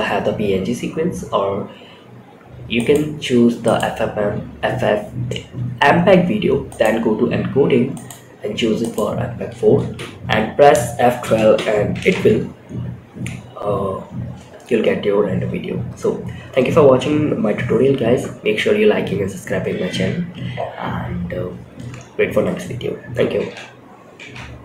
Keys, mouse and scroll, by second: 2.1-3.2 drag, 3.6-4.9 scroll down 1, 4.9-6.0 scroll down 2, 6.0 click, 6.4-7.3 scroll down 2, 7.3-8.4 drag, 9.2 space, 10.9 space, 11.5 shift+Left.